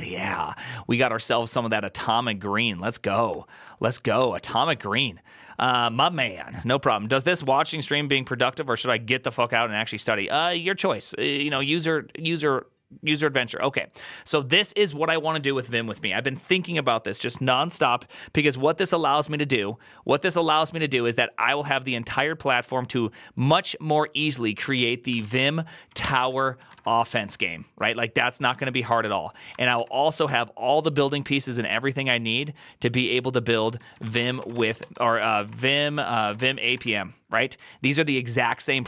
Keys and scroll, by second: 25.7-27.6 typing, 29.2-30.1 typing, 34.0-37.1 typing, 35.1 ctrl+shift+Left.